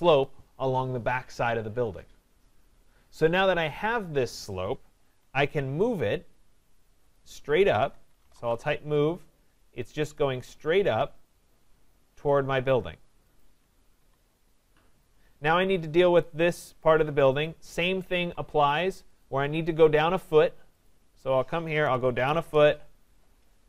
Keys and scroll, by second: 8.5 Return, 13.9 Escape, 22.4 Return.